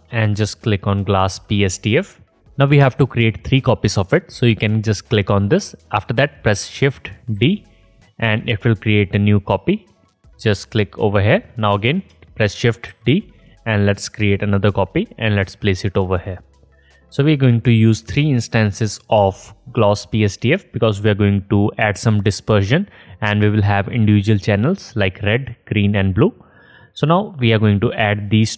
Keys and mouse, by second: 5.1 click, 7.3 shift+d, 12.9 shift+d, 17.3-27.0 drag.